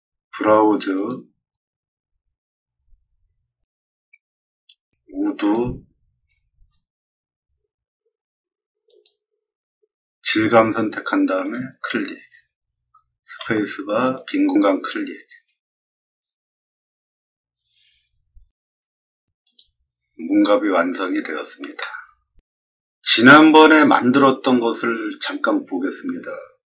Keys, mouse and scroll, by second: 0.9 click, 3.6-4.1 scroll down 4, 5.3 click, 6.1-6.6 scroll down 3, 8.8 click, 11.4 click, 14.1 click, 19.4 click, 21.7 middle click.